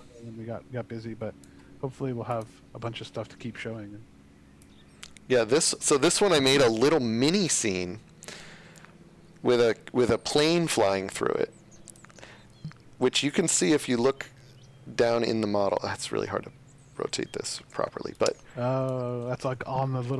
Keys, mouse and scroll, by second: 4.6 click, 8.7 click, 9.9 shift+scroll, 12.4 space, 13.3 shift+space, 13.4 shift+click, 17.6 space, 18.1 click, 18.4 a, 18.9 w, 19.5 space.